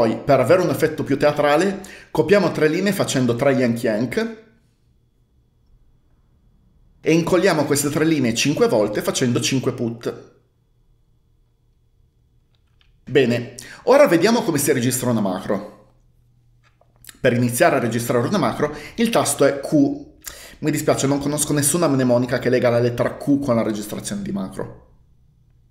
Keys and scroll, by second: 3.4-4.4 typing, 9.6-10.5 typing, 20.0 typing.